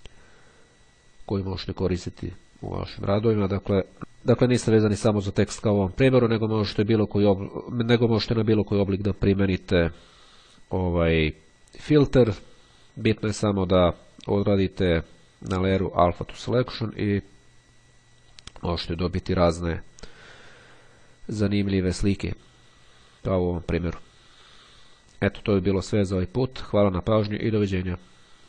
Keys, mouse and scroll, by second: 2.6 click, 3.6 click, 5.2 click, 6.6 click, 18.2 click, 19.2 click.